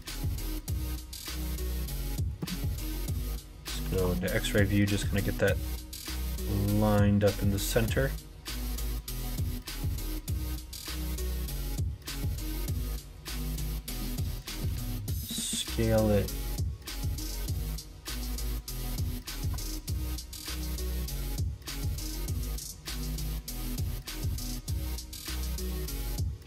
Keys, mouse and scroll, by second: 0.5 click, 1.5-2.0 scroll up 1, 2.0 middle click, 2.7 KP_1, 3.8 alt+z, 5.5-11.0 drag, 11.4 scroll up 1, 11.5 middle click, 11.6 scroll down 1, 12.1 scroll up 1, 12.3 scroll down 1, 13.1 click, 14.6 s, 25.6 click, 26.0 r.